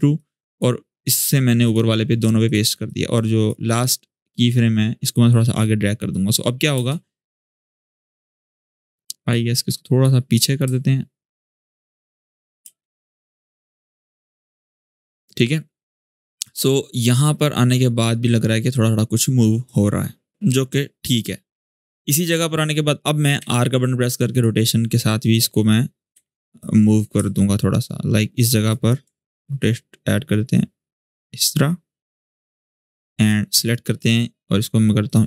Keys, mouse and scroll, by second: 6.5 space, 8.2-8.9 drag, 12.4 space, 14.8-21.4 drag, 23.1 r, 24.1 click, 25.9 u, 26.3-28.5 drag, 29.3-31.5 ctrl+drag, 32.2-32.8 click, 33.2-33.9 drag, 34.8 click.